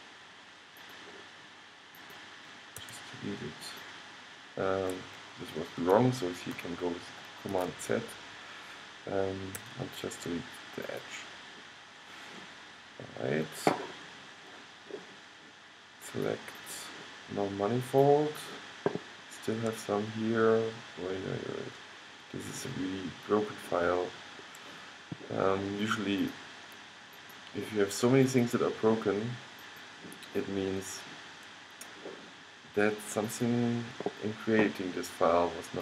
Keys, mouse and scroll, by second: 0.3 middle click, 2.9 x, 7.7 super+z, 9.7 x, 11.8-12.9 middle drag, 13.1-15.0 middle drag, 16.4 click, 16.5 middle click, 18.5 middle click, 20.9 middle click, 21.1 middle click, 22.0-24.1 middle drag, 24.3 middle click, 24.6-25.8 middle drag, 26.3-32.7 drag, 33.4-35.4 drag.